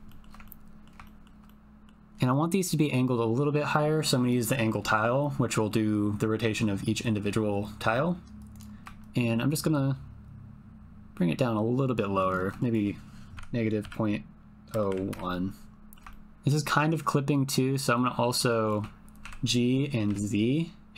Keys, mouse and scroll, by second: 0.0 shift+middle click, 0.4 ctrl+middle click, 1.0 shift+middle click, 1.4 middle click, 4.2-8.4 drag, 8.4 middle click, 9.0-12.4 shift+drag, 12.4 shift+middle click, 12.7-15.1 drag, 15.7 ctrl+click, 16.1 shift+click, 17.3 scroll up 1, 17.9 scroll up 1, 19.2 g, 20.0 z.